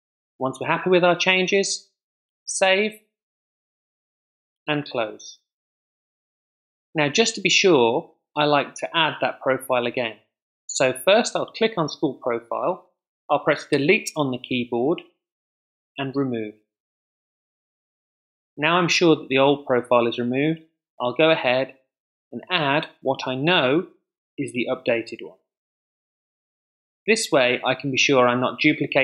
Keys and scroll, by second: 13.7 BackSpace.